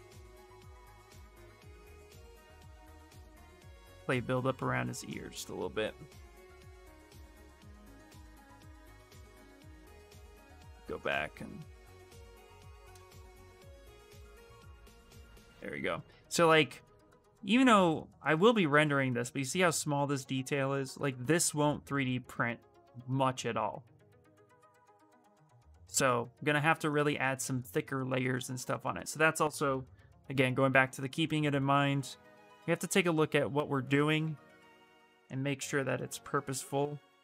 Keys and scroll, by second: 9.6-10.8 typing, 17.6 s.